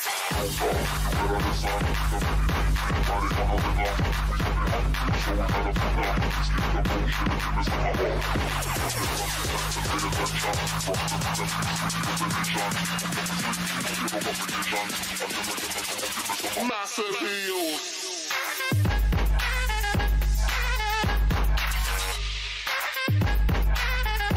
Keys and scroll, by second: 2.0 ctrl+BackSpace, 11.5 ctrl+BackSpace, 12.5 ctrl+d, 20.8 ctrl+BackSpace, 22.1 ctrl+d.